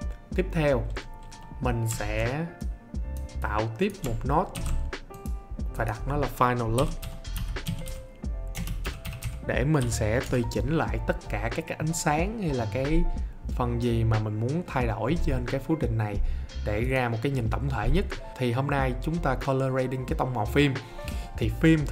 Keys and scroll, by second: 4.5 alt+s, 6.5-9.7 typing, 10.1 Return.